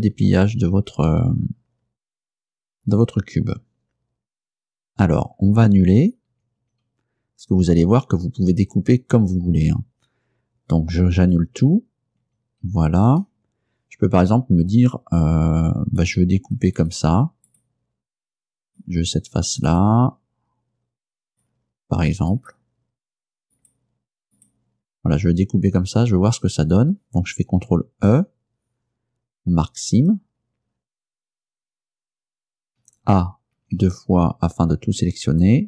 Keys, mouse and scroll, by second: 6.4 ctrl+z, 11.5 ctrl+z, 12.3 ctrl+z, 16.1 right click, 16.8 shift+right click, 17.2 shift+middle click, 17.5 shift+right click, 18.7 shift+right click, 19.8 shift+right click, 21.3 shift+right click, 22.4 shift+right click, 23.6 shift+right click, 24.4 shift+right click, 27.9 ctrl+e, 30.0 click, 32.9 a, 33.6 a.